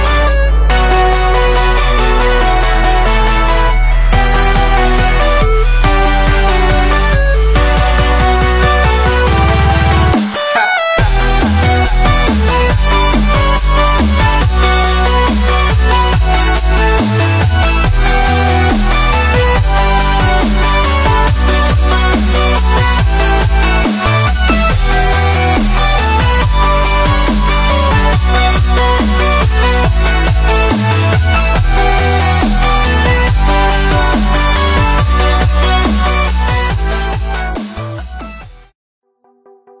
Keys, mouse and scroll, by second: 1.1 e, 1.8 middle drag, 1.9-2.3 scroll down 1, 2.3 click, 2.8-4.2 middle drag, 4.2 KP_3, 4.8 ctrl+KP_3, 5.3-6.0 scroll up 2, 5.5 shift+middle drag, 6.0-8.2 shift+middle drag, 8.2-9.1 drag, 9.1-9.7 middle drag, 9.7-11.0 drag, 11.2-12.8 middle drag, 11.4 scroll down 1, 12.8 scroll up 1, 12.9 scroll down 1, 13.2-14.2 scroll up 1, 14.2 scroll down 2, 14.4-14.7 middle drag, 14.7 click, 15.1 click, 15.4-15.8 scroll down 2, 15.8-16.7 scroll up 5, 16.7-18.3 middle drag, 18.3 ctrl+r, 20.6 scroll down 3, 20.8-21.5 middle drag, 21.5 Tab, 21.8-22.1 middle drag, 22.1 click, 22.4 s, 23.1 click, 23.7 shift+middle click, 24.6-25.0 drag, 25.0 click, 25.4 drag, 25.9 shift+middle click, 26.8-28.1 drag, 28.1 middle drag, 28.3-28.6 scroll down 2, 28.6-29.8 drag, 29.8 scroll up 1, 30.0 middle drag, 30.2-30.6 scroll down 1, 30.6 s, 31.3-31.9 drag, 31.9 s, 32.5 click, 33.1 scroll down 3, 33.4-33.8 middle drag, 33.8 click, 34.0-34.4 middle drag, 34.4-34.7 drag, 35.7 s, 37.5 s, 38.7 click, 39.0-39.5 middle drag, 39.5-39.8 scroll up 1.